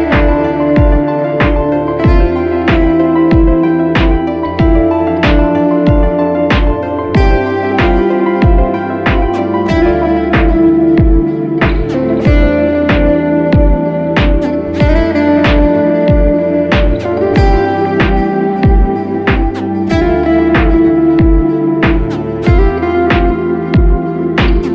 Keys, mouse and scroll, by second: 4.0 double click, 11.4 [, 11.8 [, 11.9 [, 12.4 double click, 24.5 ctrl+t.